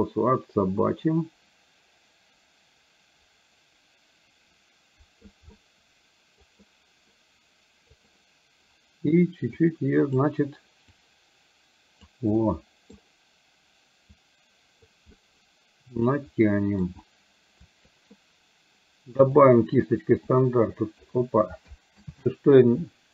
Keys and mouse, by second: 0.0-5.3 drag, 5.6 middle click, 9.8 click, 11.0-12.3 drag, 12.4 middle click, 14.1 click, 15.1-16.9 middle drag, 19.4 click, 20.4 click, 22.1 ctrl+z.